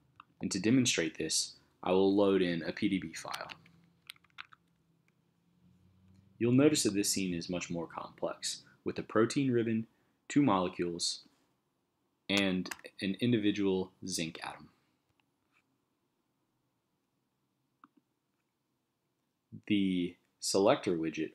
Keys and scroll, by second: 3.1-4.4 typing, 4.7 Return, 12.7 super+=.